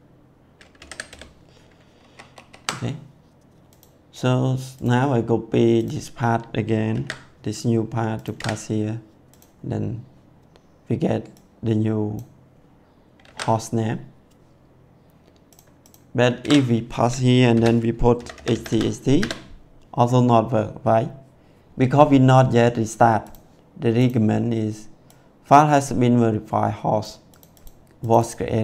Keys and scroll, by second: 0.7 u, 0.8 b, 1.0 e, 1.9 ctrl+s, 6.9 ctrl+c.